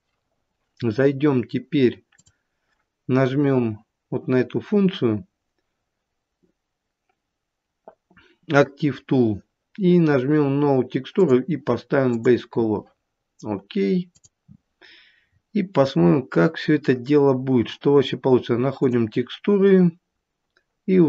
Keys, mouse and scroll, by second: 2.1 click, 11.2 click, 15.2 scroll down 1, 17.2 scroll down 12, 18.8 click, 18.8-20.0 scroll down 4, 20.0-20.3 scroll down 2.